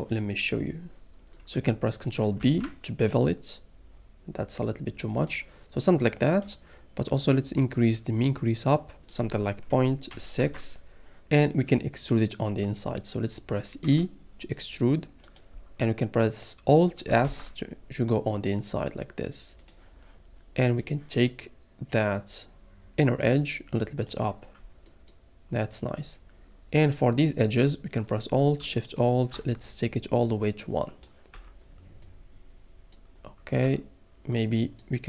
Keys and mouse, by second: 2.4 ctrl+b, 7.6-9.0 drag, 9.2-10.4 drag, 13.8 e, 17.2 alt+s, 19.6 click, 20.8 click, 22.0 click, 28.8 alt+shift+click, 30.3 click, 31.3 Tab, 33.6 Tab.